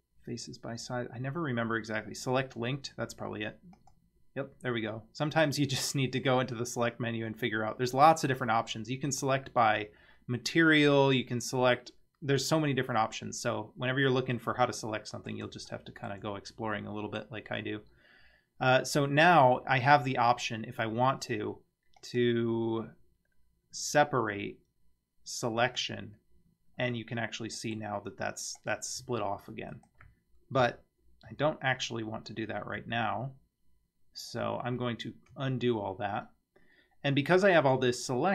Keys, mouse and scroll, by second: 5.8-13.5 drag, 14.3-15.0 scroll down 2, 15.0 middle click, 15.7 shift+middle click, 16.8-17.2 middle drag, 18.2 scroll up 2, 18.6 scroll down 1, 22.0-25.9 drag, 26.5-26.8 scroll down 1, 26.8 Tab, 27.3-27.8 middle drag, 28.6 click, 29.0 g, 31.3 ctrl+z, 32.8 ctrl+z, 34.5 ctrl+z, 38.2 middle click.